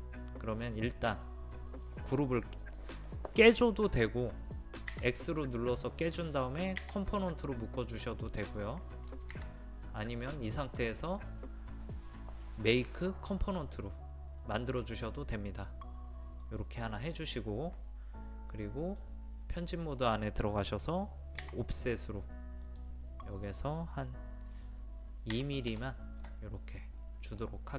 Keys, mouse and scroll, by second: 4.9 x, 6.8 w, 8.5 click, 9.3 ctrl+z, 10.1 click, 11.8 right click, 13.5 click, 21.4 o, 22.6 click, 25.3 KP_2, 26.9-27.4 scroll up 1.